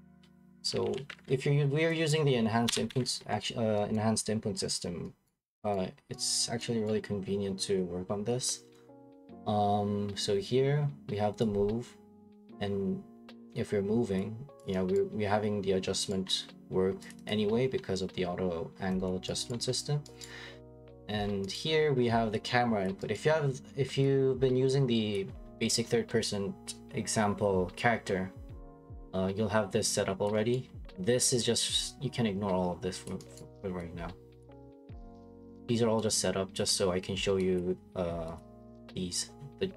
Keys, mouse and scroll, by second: 0.4-1.2 typing, 2.7 Escape, 2.9 Escape, 3.2-3.9 scroll, 3.9 right click, 3.9-4.9 scroll, 5.3 right click, 5.7 right click, 6.3 right click, 6.9 right click, 14.1 click, 14.6 click, 14.9 right click, 16.1 right click, 16.2 middle click, 16.3 middle click, 16.3 middle click, 16.9 middle click, 17.1 click, 17.3 click, 18.3 scroll, 19.1 click, 19.5 right click, 20.2 right click, 20.5 scroll, 20.6 middle click, 21.1 middle click, 21.3 middle click, 21.5 right click, 22.0 middle click, 22.0 middle click, 22.9 click, 23.1 right click, 25.1 click, 30.2 click, 30.5 right click, 30.6 middle click, 30.7 middle click, 33.0 click, 33.4 right click, 34.4 right click, 35.0 middle click, 35.3 middle click, 35.3 right click, 35.5 middle click, 35.5 middle click, 36.6 click, 36.8 middle click, 38.4 click.